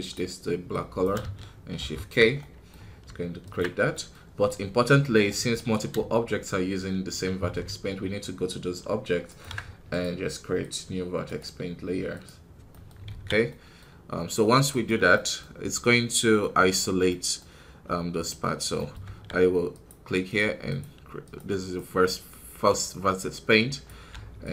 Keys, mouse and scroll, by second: 0.6 click, 1.7 shift+k, 2.3-3.5 middle drag, 3.5 ctrl+Tab, 3.8-5.5 middle drag, 5.5-10.6 right drag, 10.6 click, 11.2 right click, 12.1 click, 12.6-14.6 middle drag, 14.6-23.8 right drag, 23.8 click, 24.4 z.